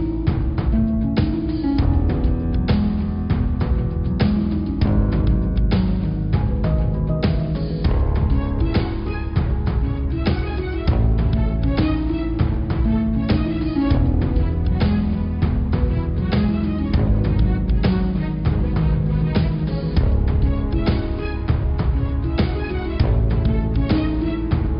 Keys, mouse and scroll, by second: 1.8 click, 7.9 click, 10.2-12.1 drag, 12.1 middle click, 12.7 click, 19.0 click, 20.0 click, 22.7 click, 23.3 click.